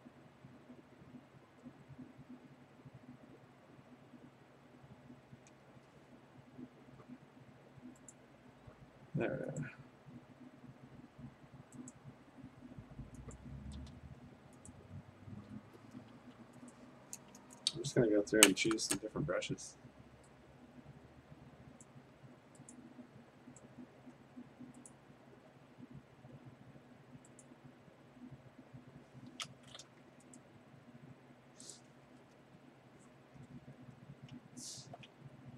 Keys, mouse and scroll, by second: 8.2 click, 9.7 click, 11.9 click, 13.4 click, 13.8 a, 14.7 right click, 15.6 Escape, 16.2 b, 16.7 right click, 17.4-20.1 scroll, 21.8 click, 22.8 click, 23.8-24.9 scroll, 24.9 click, 24.9 scroll, 27.5 click, 30.0 a, 30.4 right click, 31.8 click, 32.4 Return, 34.3 middle click, 34.4-34.9 scroll, 35.3 v.